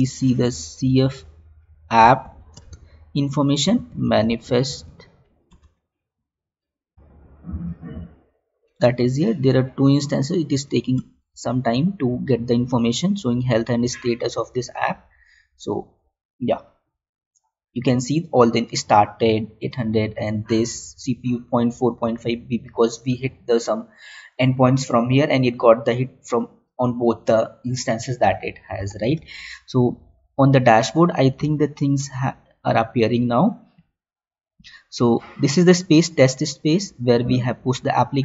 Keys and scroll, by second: 2.4 space, 29.5 alt+Tab, 32.2 alt+Tab.